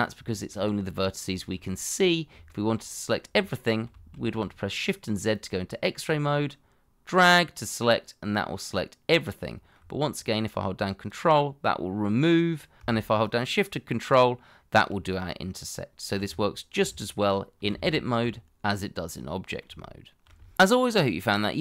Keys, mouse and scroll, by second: 1.3 shift+middle click, 1.7 scroll up 1, 2.5 shift+middle click, 3.9 shift+z, 7.7 middle click, 10.1 ctrl+click, 13.2 ctrl+shift+click, 15.8-16.2 scroll down 1, 16.2 Tab, 17.4 scroll down 1, 17.7 shift+z, 18.1 middle click, 19.8 shift+middle click.